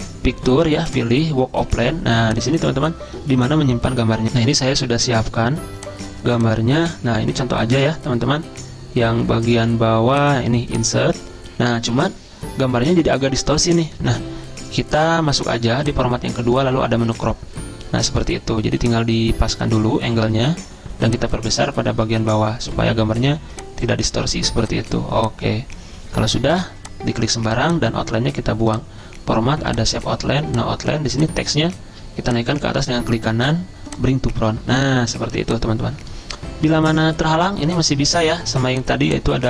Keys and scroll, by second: 4.6 F10.